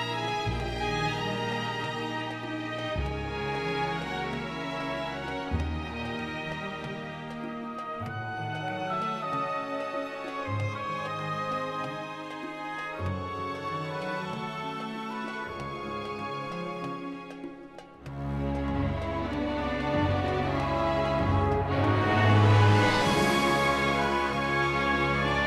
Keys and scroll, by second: 0.8 shift+d, 1.4 x, 17.4-19.0 typing, 19.6 Return, 22.1 3, 23.7 Return, 25.2 ..